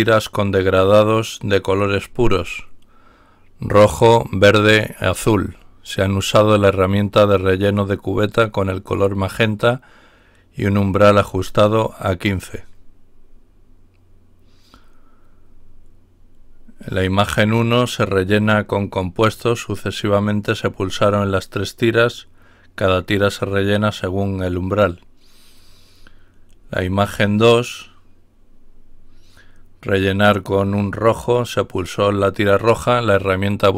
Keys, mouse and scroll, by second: 13.5-14.4 scroll down 4, 26.4-27.8 scroll down 4, 28.6-29.0 scroll up 2.